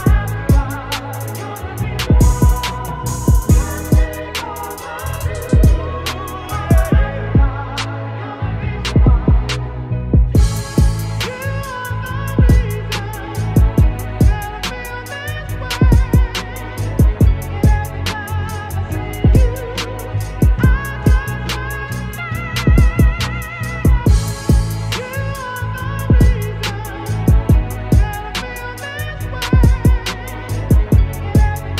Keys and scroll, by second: 0.3 ctrl+-, 1.1 ctrl+=, 6.8 ctrl+j, 10.8 ctrl+t, 12.1 ctrl+z, 17.4 ctrl+t, 23.0 ctrl+z, 24.0 ctrl+-, 24.7 Return, 26.1 b, 29.0 x, 29.9 x, 30.9 space.